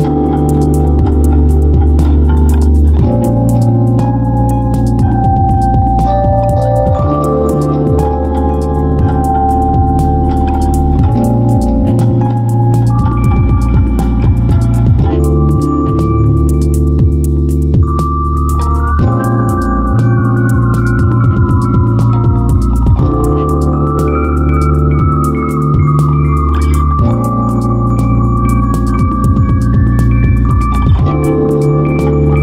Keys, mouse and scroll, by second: 28.4 m.